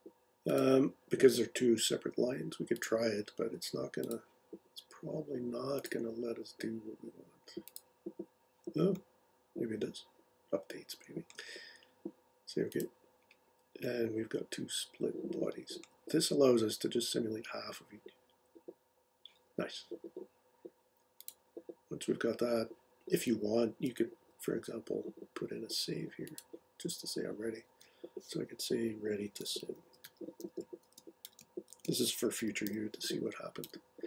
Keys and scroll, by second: 27.7 super+s, 29.1-32.9 typing, 33.6 Return.